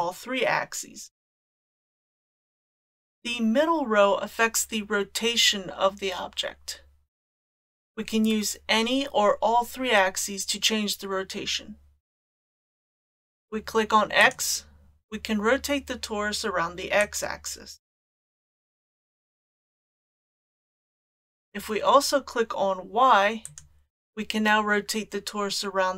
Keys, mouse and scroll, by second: 0.0-2.0 drag, 14.2 click, 17.0-19.7 drag, 23.5 click.